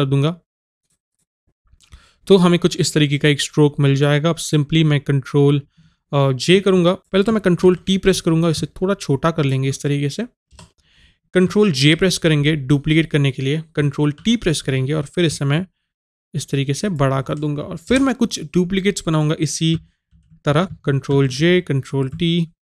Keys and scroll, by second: 7.0 ctrl+t.